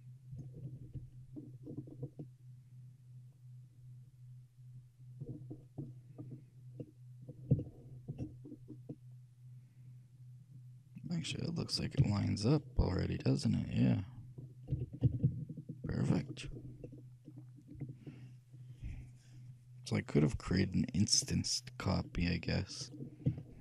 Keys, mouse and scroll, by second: 1.5-4.1 middle drag, 5.4-6.9 scroll up 1, 6.9-10.6 middle drag, 11.7-15.1 middle drag, 12.1 z, 14.9 g, 17.0-18.8 middle drag, 21.4-23.2 middle drag, 23.5-23.6 shift+middle drag.